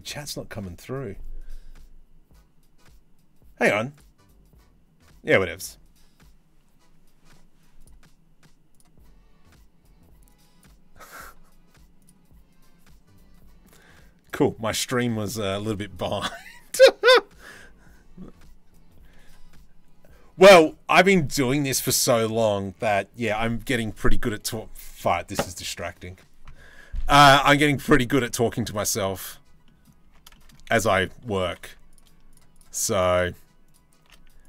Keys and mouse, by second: 27.5 shift+middle click, 28.5 shift+middle click, 28.8 click, 29.3 click, 29.7 Tab, 29.9 shift+middle click, 31.1 2, 34.1 alt+click.